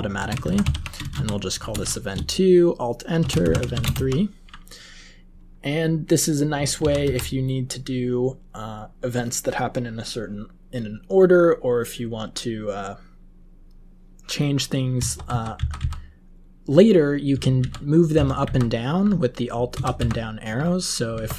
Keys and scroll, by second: 0.0-4.4 typing, 6.7 ctrl+x, 7.2 ctrl+s, 14.9 Page_Down, 15.2 Down, 15.5 Up, 15.7 Up, 17.5 alt+Up, 18.1 alt+Down, 18.4 alt+Up, 19.7 alt+Down, 19.9 alt+Up.